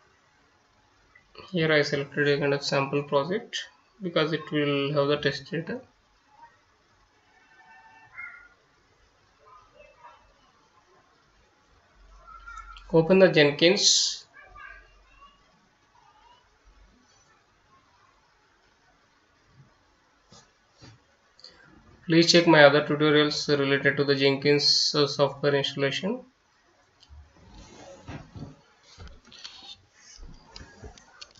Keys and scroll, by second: 2.1 F9, 9.6 F9, 24.2 Return, 24.4-31.3 typing.